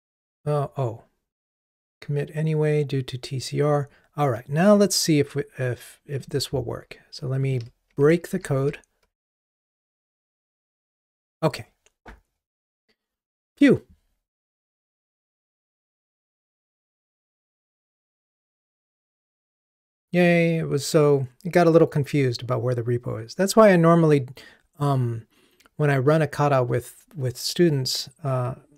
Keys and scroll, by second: 8.7 ctrl+r, 9.4 ctrl+r.